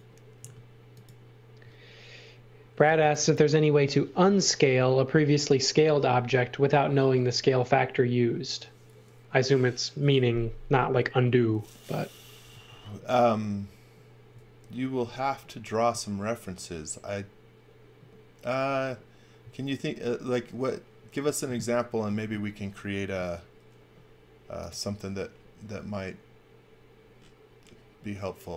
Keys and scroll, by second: 0.4 space, 2.9 x, 22.0 space, 23.3 a.